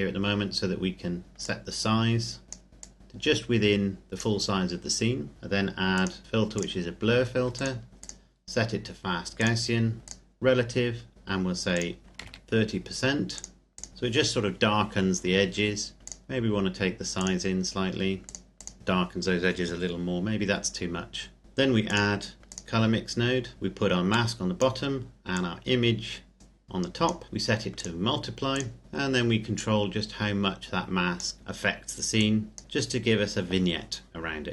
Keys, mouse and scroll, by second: 1.1 scroll up 1, 1.4 click, 5.9 click, 11.7 click, 12.1 KP_3, 13.4 click, 16.0 click, 21.4 middle click, 21.8 click, 29.6 click.